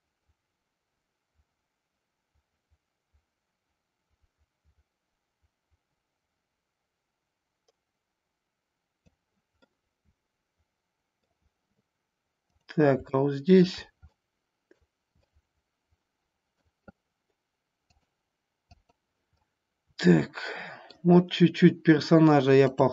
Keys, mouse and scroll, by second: 9.6-11.3 middle drag, 12.5 click, 13.0-13.6 shift+middle drag, 14.0-14.9 middle drag, 15.1-16.7 middle drag, 17.8 click, 18.6 click, 19.4-21.0 middle drag, 22.6 click.